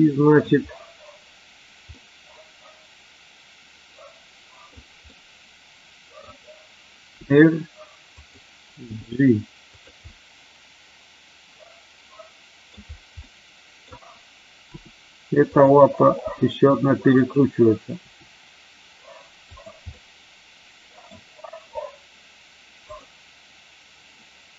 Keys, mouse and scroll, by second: 1.9-4.6 middle drag, 5.0-6.1 middle drag, 7.1 r, 8.1 click, 8.7 g, 9.6 click, 10.1-12.6 middle drag, 12.6 scroll down 1, 13.2-13.7 middle drag, 13.7 scroll down 1, 14.6 r, 15.5 click, 16.2 g, 17.1 click, 18.0 r, 19.5 click, 19.9-21.0 middle drag.